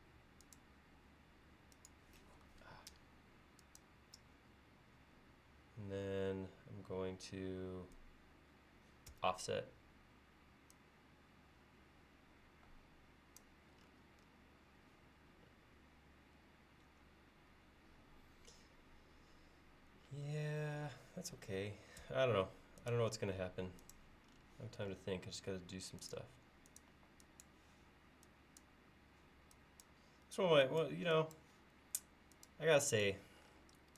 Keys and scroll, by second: 0.1 Up, 0.7 Up, 0.8 typing, 0.9 Up, 9.2 f, 22.1 l, 27.0 e.